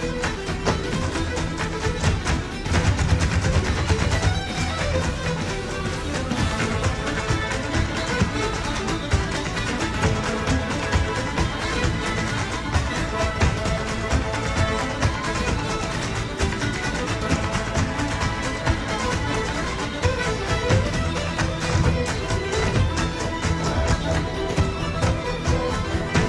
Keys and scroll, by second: 19.4 alt+super+z, 20.3 Home, 21.5 alt+super+z.